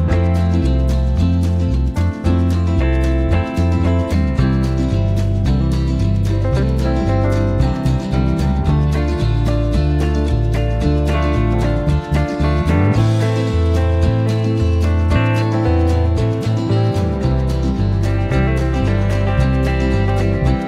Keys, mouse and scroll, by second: 0.5 click, 2.6 shift+F6, 3.8 KP_Add, 5.0 space, 7.8 click, 8.8 click, 9.8 click, 10.9 click, 12.8 F1, 14.3 click, 16.5 KP_Add, 17.6 space.